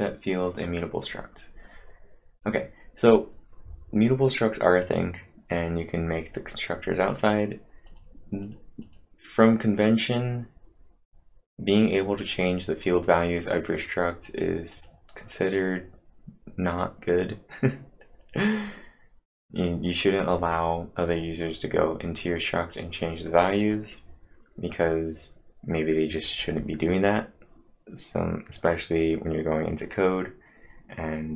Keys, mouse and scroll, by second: 2.6-3.4 typing, 2.8 scroll down 1, 7.1 scroll up 4, 7.9 click, 8.4 click, 8.8 click, 14.7 click, 18.9 click, 18.9-21.3 scroll up 3.